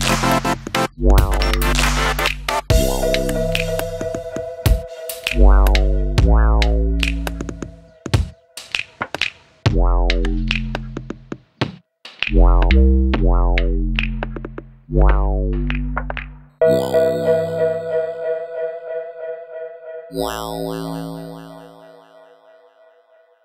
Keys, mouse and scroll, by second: 0.7-2.5 drag, 3.4-4.8 drag, 4.0 KP_0, 6.4 ctrl+t, 7.9 click, 8.7 click, 9.6-11.2 drag, 10.6 KP_0, 12.2-12.8 drag, 13.8-15.1 drag, 18.9 shift+a, 22.3-23.4 drag.